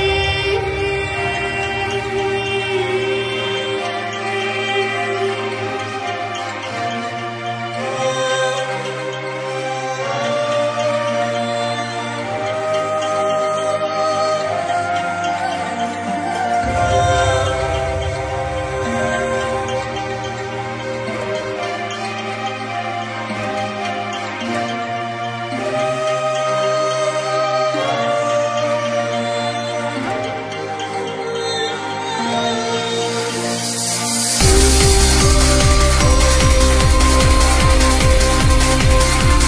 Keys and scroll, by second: 1.6 ctrl+z.